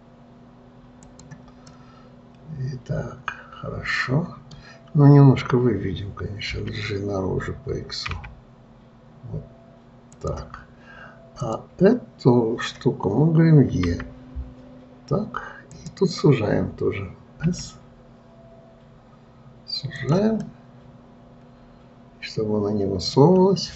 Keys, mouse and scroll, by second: 2.1-5.2 middle drag, 11.8 click, 14.4 e, 20.9-23.7 middle drag.